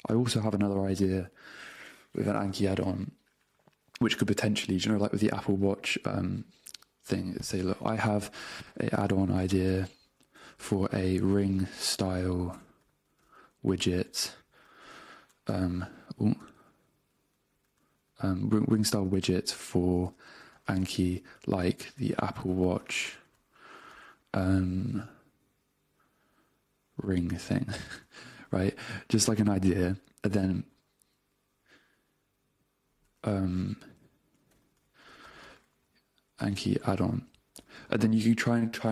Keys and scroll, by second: 7.8-10.9 typing, 12.6 BackSpace, 13.4 space, 15.0 space, 15.6 alt+BackSpace, 16.7 super+Tab, 18.5 super+z, 19.5 Right, 20.1 space, 21.8-24.0 typing, 27.3 space, 27.7 g, 27.9 Return, 34.1 w, 34.5 BackSpace, 35.4 space, 37.8 Return.